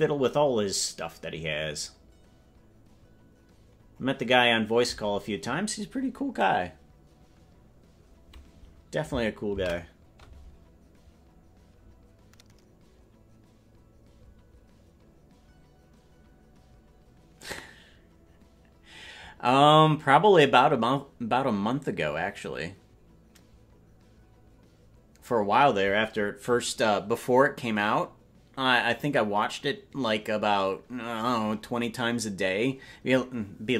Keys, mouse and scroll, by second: 0.4 scroll down 1, 0.5-1.2 scroll down 1, 1.2-2.2 scroll down 6, 2.2-2.7 scroll down 1, 2.7-3.3 scroll down 1, 3.3-3.7 scroll down 1, 3.7-7.7 scroll down 1, 7.7-8.3 scroll down 1.